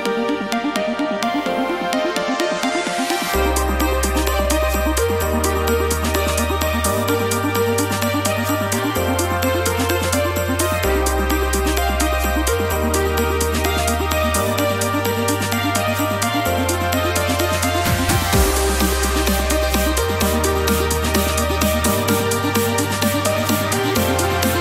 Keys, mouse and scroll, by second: 0.0 scroll, 0.7 scroll, 2.2 click, 3.4 click, 6.4 click, 9.3 3, 9.3-11.1 drag, 9.4 1, 17.0 1.